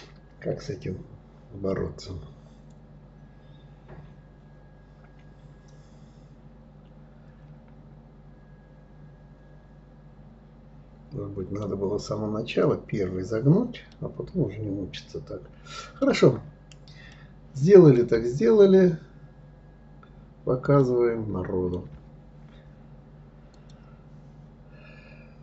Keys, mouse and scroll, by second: 0.4-3.5 middle drag, 13.6-16.0 middle drag, 16.0 scroll down 1, 16.8-17.9 middle drag, 17.9-18.4 scroll up 2, 19.5-19.9 scroll up 2, 20.5-23.4 shift+middle drag.